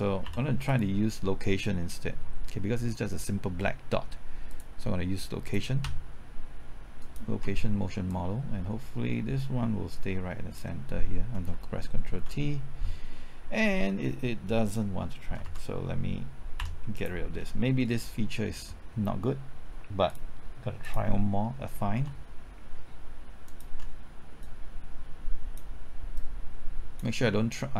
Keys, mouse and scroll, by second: 0.2 x, 0.6 click, 5.8 typing, 7.0 ctrl+click, 8.0-11.1 drag, 11.4 typing, 12.1 ctrl+t, 15.4 ctrl+z, 16.5 x, 16.9 click, 17.3-17.6 scroll down 1, 17.6 middle click, 18.3 scroll up 1, 20.0 click, 23.4 ctrl+click, 24.4-27.7 drag.